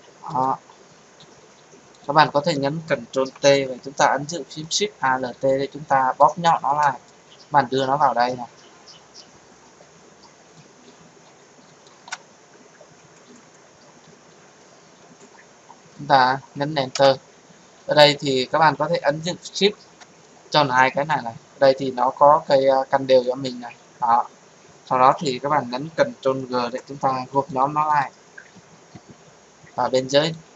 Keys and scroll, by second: 3.1 ctrl+t, 16.9 Return, 26.5 ctrl+g.